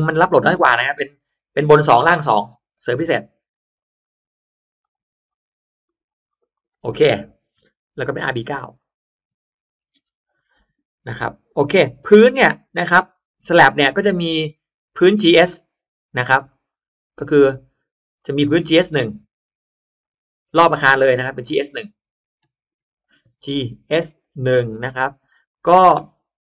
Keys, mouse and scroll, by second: 0.8 2, 1.5 click, 2.0 click, 2.4 2, 3.4 click, 4.7 click, 5.1 2, 5.2 click, 5.8 click, 6.2 click, 8.5 click, 8.7 click, 9.7 BackSpace, 13.3 click, 16.4 click, 18.0 click, 18.8 right click, 19.9 click, 20.7 click, 21.4 click, 22.4 BackSpace, 23.1 shift+g, 23.6 shift+s, 24.4 1, 25.3 click.